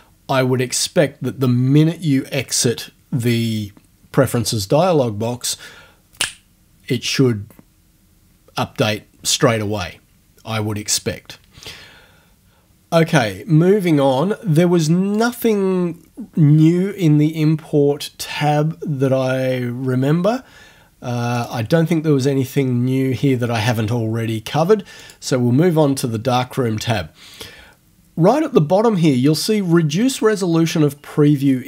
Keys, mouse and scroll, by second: 15.2 click, 21.4 click, 25.0 click.